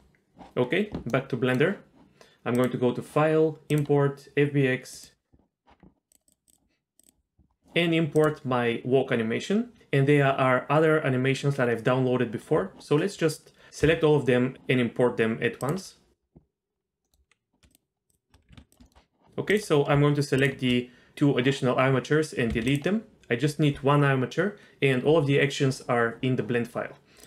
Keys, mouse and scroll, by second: 1.1-2.5 middle drag, 2.5-5.3 drag, 17.0-17.6 middle drag, 17.7 shift+drag, 18.1 shift+click, 18.5 g, 18.8 shift+middle click, 19.5 click, 20.4 shift+drag, 22.5 x.